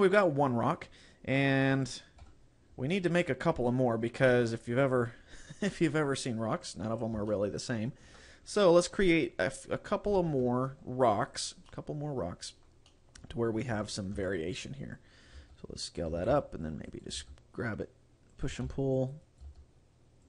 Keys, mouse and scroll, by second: 1.4 scroll down 1, 2.2 KP_7, 3.4 scroll down 1, 3.8 shift+middle click, 4.6 scroll up 1, 4.8-5.6 scroll down 6, 5.9-6.4 scroll up 6, 6.8 scroll up 2, 7.4 shift+middle click, 10.5 shift+d, 11.4 click, 11.8 middle click, 13.0 middle click, 13.8 KP_7, 14.3 Tab, 15.4 s, 16.0 click, 16.2 a, 16.4 c, 17.0 right click, 17.2 g, 18.6 click, 18.6 a, 18.7 c, 19.5 g.